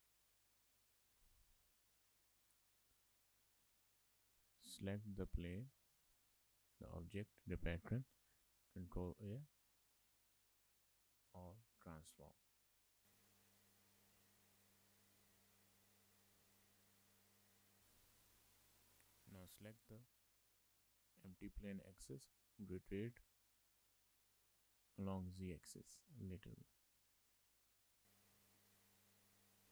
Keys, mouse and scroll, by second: 2.7 middle click, 3.6 click, 6.0 shift+middle click, 8.5 ctrl+a, 10.9 middle click, 14.2 middle click, 16.3 click, 17.0 click, 17.7 click, 18.2 shift+middle click, 18.3 middle click, 19.3 middle click, 20.3 click, 22.8 click, 28.7 middle click, 29.3 click.